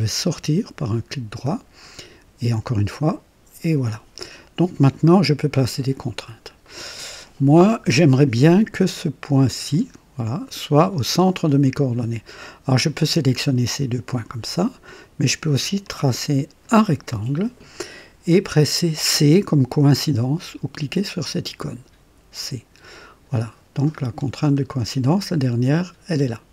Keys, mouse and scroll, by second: 0.8 right click, 2.5 right click, 6.1 scroll up 1, 6.7 right click, 9.7-10.7 drag, 12.7 click, 14.1 click, 14.9 click, 15.8-16.8 drag, 22.0 c, 24.0-24.5 scroll down 3.